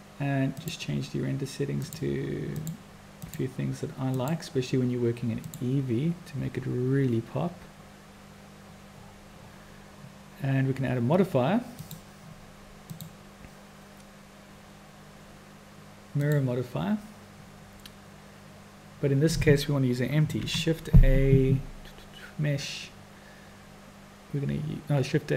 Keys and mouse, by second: 2.1 click, 2.6 click, 3.6 click, 4.2 click, 5.5 click, 11.8 click, 12.9-17.0 drag, 20.6 shift+a.